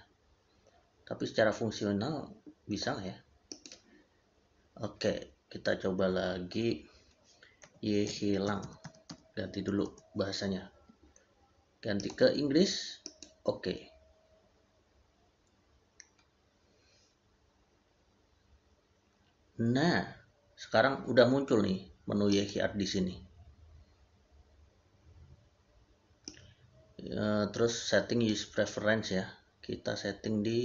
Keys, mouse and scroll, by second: 3.3 click, 7.9 q, 8.4 a, 9.7 Return, 11.8 Return, 22.1 click.